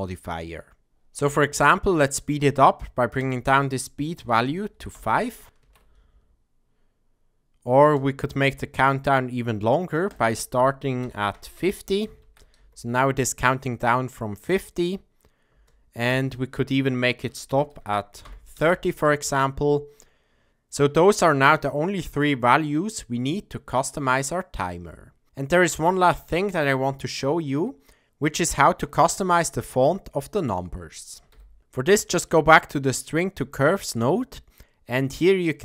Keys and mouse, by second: 0.9 space, 3.2-6.7 drag, 5.6 shift+Left, 7.8 space, 10.1-12.9 drag, 12.2 shift+Left, 12.5 space, 15.4 space, 16.1-18.9 drag, 18.9 space, 31.3 n, 31.6 middle click, 32.8 click.